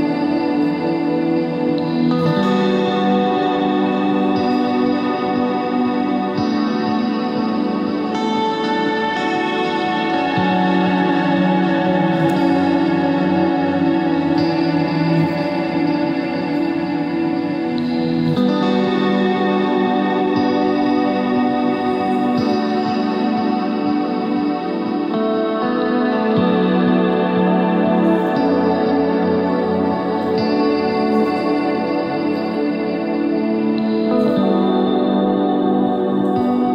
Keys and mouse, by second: 0.4 click, 2.2 middle click, 2.6 ctrl+Tab, 3.6 ctrl+Tab, 4.0 z, 5.3-5.8 ctrl+z, 6.1 ctrl+z, 6.5 ctrl+z, 6.6-7.1 ctrl+z, 7.4 ctrl+z, 8.2 KP_3, 8.9 KP_1, 9.3 ctrl+Tab, 10.3 z, 13.4 ctrl+Tab, 14.5 z, 16.5 i, 18.1 e, 20.4 click, 20.5 s, 22.8 click, 23.7 s, 26.1 click, 26.5 Tab, 28.8 KP_3, 28.8 KP_1, 29.3 Tab, 30.5 z, 31.0 c, 32.0 z, 33.3 c, 33.8 z, 34.0 c, 35.1 z, 35.5 Tab.